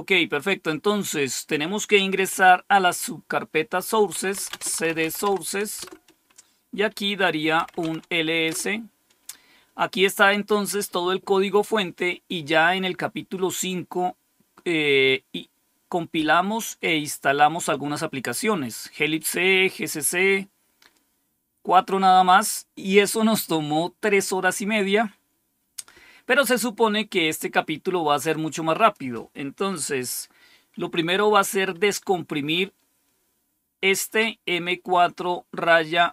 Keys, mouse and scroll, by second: 3.8-5.4 typing, 5.7 Return, 7.3-8.0 typing, 8.4 Return, 22.1-22.8 scroll down 2, 24.4-25.1 scroll down 2, 28.7 click.